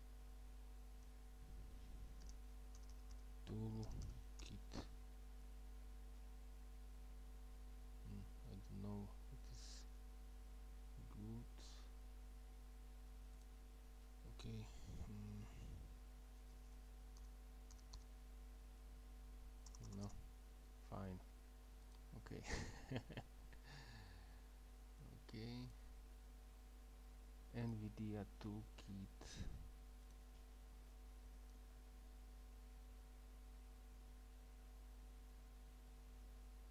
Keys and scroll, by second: 0.8-4.9 typing, 17.2-18.5 typing, 19.7 typing, 31.0-36.7 typing.